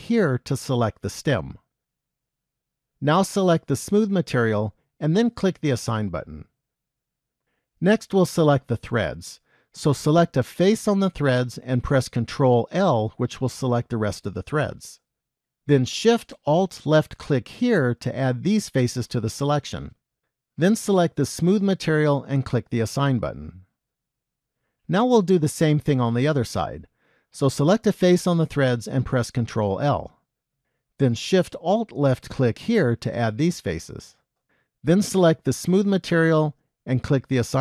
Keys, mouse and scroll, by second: 0.1 alt+click, 2.7-4.3 scroll up 4, 4.3 click, 5.9 click, 7.8 middle click, 10.4 click, 12.6 ctrl+l, 17.3 alt+shift+click, 21.6 click, 23.4 click, 25.0 middle click, 28.2 click, 30.3 ctrl+l, 32.7 alt+shift+click, 35.7 click, 37.5 click.